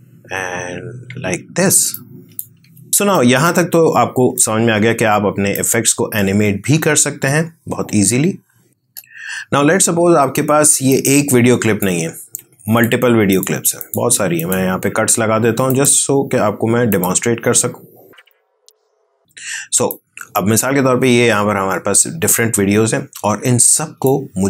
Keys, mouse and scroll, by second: 2.9-8.7 drag, 8.7 ctrl+z, 10.8 click, 11.2-12.7 drag, 19.8-24.4 drag.